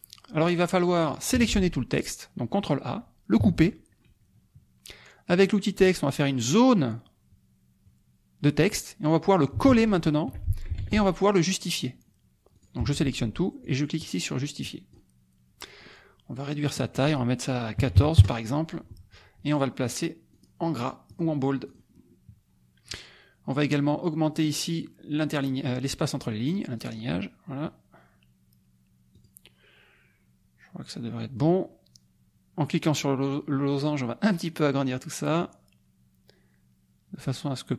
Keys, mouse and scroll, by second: 1.0 click, 1.4 ctrl+a, 3.4 ctrl+x, 5.3 click, 6.5-8.9 drag, 9.6 ctrl+v, 10.8 ctrl+a, 12.6 ctrl+click, 12.9 ctrl+a, 13.6-15.1 drag, 16.7 click, 17.8 KP_1, 17.9 KP_4, 18.2 KP_Enter, 19.8 click, 21.1 click, 21.7 click, 26.8 click, 29.1 click, 33.0-37.7 drag.